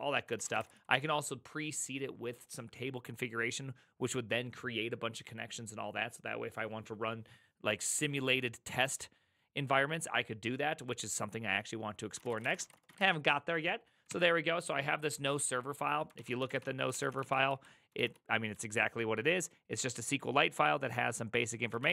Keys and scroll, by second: 0.2-1.4 typing, 12.0-14.0 typing, 16.1-18.5 typing, 21.8 ctrl+o.